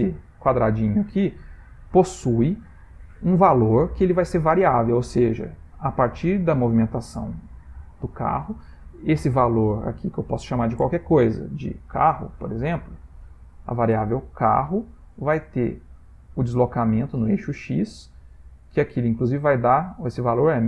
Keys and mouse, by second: 12.3 r.